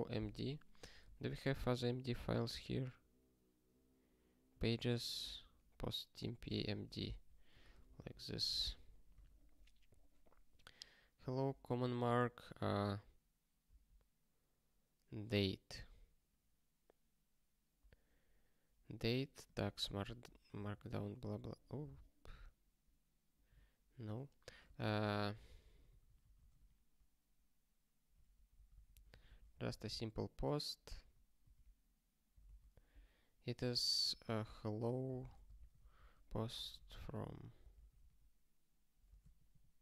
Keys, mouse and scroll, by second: 6.4 ctrl+space, 6.5 ctrl+p, 7.0 alt+<, 7.5 alt+w, 7.8 super+b, 8.7 ctrl+y, 9.2 ctrl+s, 11.3 click, 12.0 ctrl+b, 12.5 ctrl+b, 13.6 ctrl+b, 19.4 click, 24.4 click, 25.6 ctrl+n, 25.8 ctrl+n, 28.3 ctrl+p, 28.5 ctrl+p, 30.9 super+w, 32.4 Return, 34.0 click, 35.1 ctrl+b, 35.3-37.5 typing, 39.2 ctrl+/.